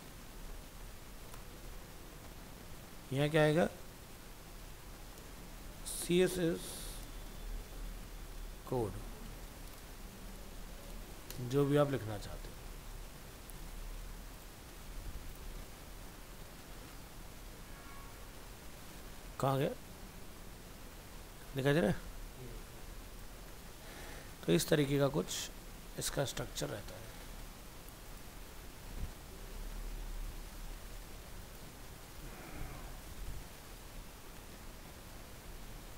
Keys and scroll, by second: 0.7 ctrl+s, 9.3 ctrl+Left, 11.7 ctrl+s, 35.8 alt+Tab.